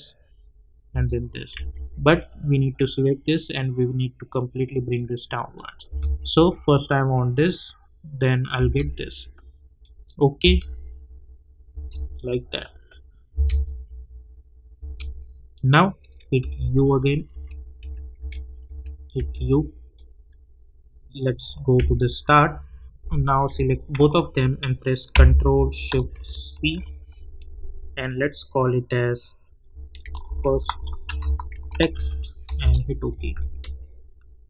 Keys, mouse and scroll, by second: 0.9 space, 1.5 j, 2.2-5.5 drag, 5.9 space, 8.5 space, 9.8 click, 10.4 space, 15.6 click, 16.4-19.6 typing, 19.9 click, 21.7 j, 23.9 ctrl+a, 26.5 ctrl+shift+c, 29.7-32.4 typing, 32.6 Return, 34.2 space.